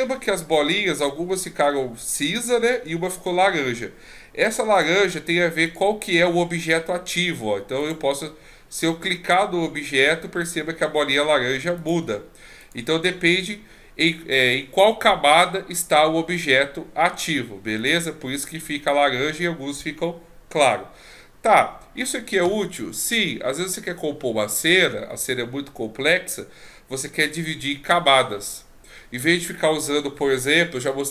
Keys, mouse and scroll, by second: 4.7 click, 5.7 right click, 7.8 click, 8.8 right click, 11.8 click, 12.6 right click, 17.8 click.